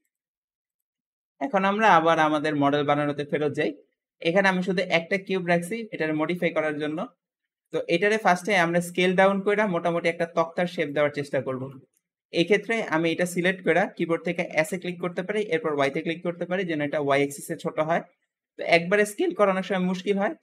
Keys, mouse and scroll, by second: 0.1 x, 0.9-3.7 shift+middle drag, 5.3-6.0 scroll down 2, 6.0-12.6 middle drag, 12.6-14.5 scroll up 1, 14.5 s, 20.3-20.4 scroll up 1.